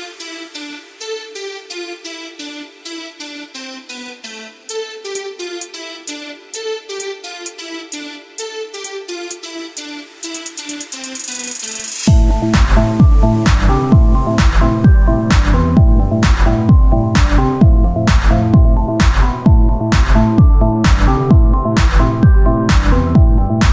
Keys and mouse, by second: 1.5-2.8 right drag, 2.8 e, 4.9 Tab, 5.7 KP_1, 8.3 KP_1, 9.2 shift+d, 11.4 Tab, 12.7 click, 12.8 z, 13.1 c, 14.0 z, 16.2-17.3 drag, 17.3 g, 20.0-21.4 drag, 22.4 right click, 22.6 z, 22.8 c.